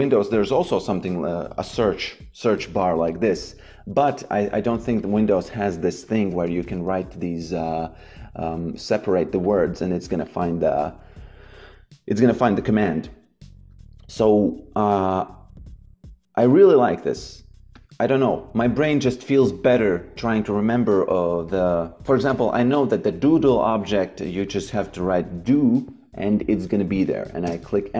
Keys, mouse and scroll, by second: 4.9 click, 5.8-7.6 typing, 9.0 click, 17.7 click, 21.4 click, 23.2 Delete, 24.3 shift+c, 24.6 d, 27.4 Return.